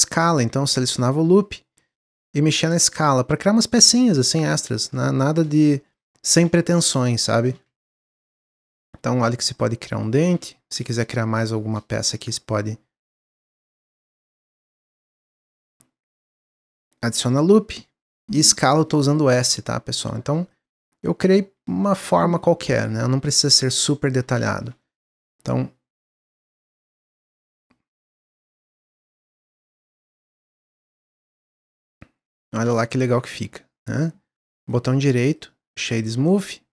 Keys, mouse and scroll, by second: 0.3 s, 2.0 click, 4.3 alt+click, 5.1 click, 5.8 s, 7.9 alt+click, 8.6 click, 10.5 ctrl+r, 12.1 ctrl+r, 14.6 s, 15.8 ctrl+r, 17.8 s, 19.9 alt+click, 20.4-21.7 drag, 21.7 middle click, 22.4 scroll down 1, 22.6 middle click, 22.9 scroll up 1, 23.2 middle click, 23.8 Tab, 24.3 Tab, 24.7 ctrl+r, 26.5 ctrl+r, 27.8 alt+click, 28.5 s, 30.3 click, 31.1 Tab, 31.4-31.7 scroll down 1, 31.8-34.5 middle drag, 34.5 right click, 35.7 click.